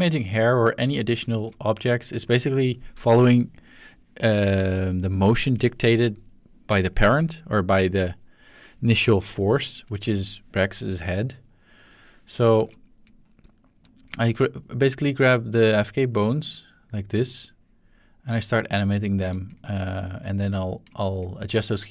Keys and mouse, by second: 0.0 ctrl+middle drag, 0.2 shift+middle drag, 3.1-8.1 middle drag, 12.4-13.5 shift+middle drag, 14.4 middle click, 15.3-16.3 middle drag, 16.3-19.2 drag, 19.3 ctrl+z, 20.2-21.1 ctrl+shift+drag.